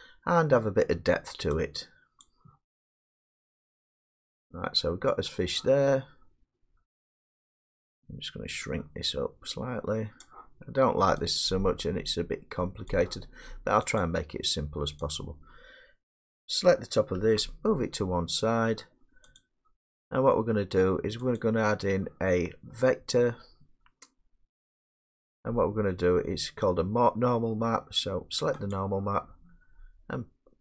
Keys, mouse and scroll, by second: 3.0 click, 5.4 middle click, 9.0-10.2 middle drag, 10.2-11.4 drag, 12.9 click, 14.0 click, 15.2 click, 17.3 g, 19.4 click, 21.4 click, 28.8 click.